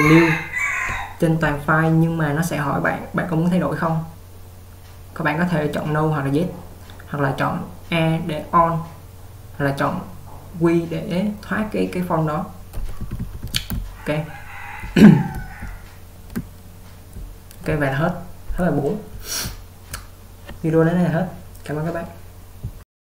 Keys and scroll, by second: 2.8 typing, 12.9-16.7 typing, 17.7-20.5 typing.